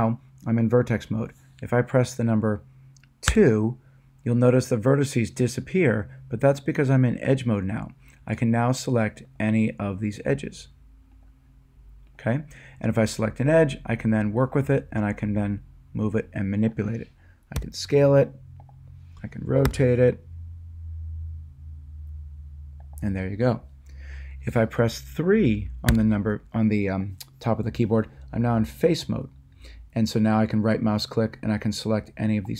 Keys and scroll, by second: 3.3 2, 17.6 s, 19.7 r, 25.9 3.